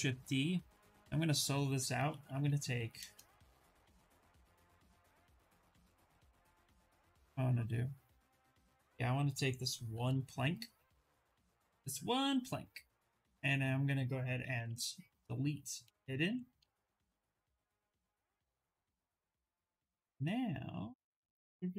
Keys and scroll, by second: 14.2 w, 15.4 q, 15.9 2, 19.8 s.